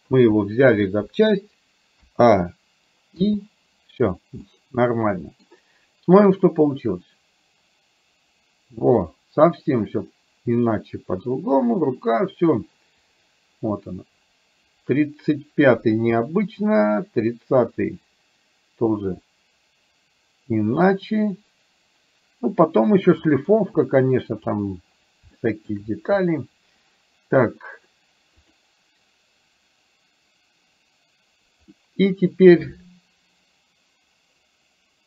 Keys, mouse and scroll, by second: 2.0 a, 3.3 i, 4.5-5.6 middle drag, 6.4-24.5 drag, 25.4 shift+middle click, 28.5 click, 31.8 middle click.